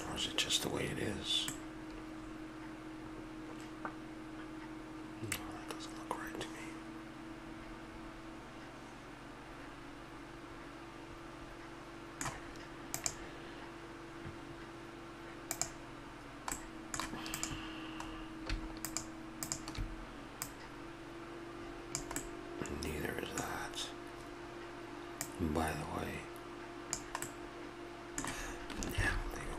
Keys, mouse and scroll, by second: 1.5-3.4 middle drag, 16.6-17.4 middle drag, 17.4-18.2 drag, 18.9-20.2 drag, 22.2-25.2 middle drag, 25.2-27.2 drag, 27.3-29.0 middle drag, 29.0 ctrl+z.